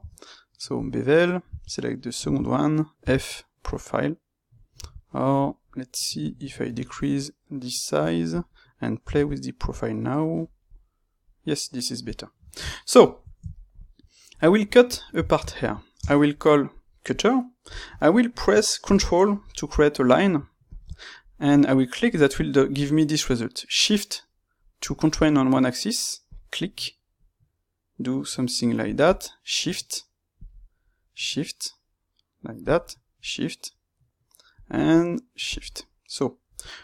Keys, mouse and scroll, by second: 0.8 space, 12.0 click, 12.4-36.8 ctrl+shift+middle drag, 17.0 space.